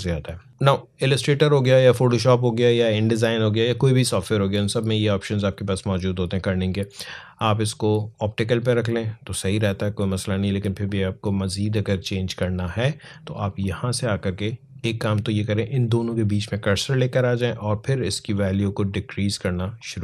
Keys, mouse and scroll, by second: 0.5-3.3 drag, 5.0 click, 8.3 click, 10.6 click, 13.4 click, 17.7 click, 18.2-18.8 scroll down 1, 19.6 click.